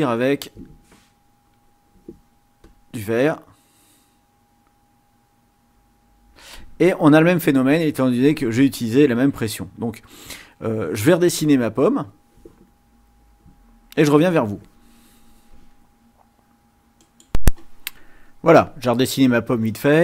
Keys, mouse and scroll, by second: 1.5 click, 2.6 click, 9.0 ctrl+z, 11.9 click, 17.0 click.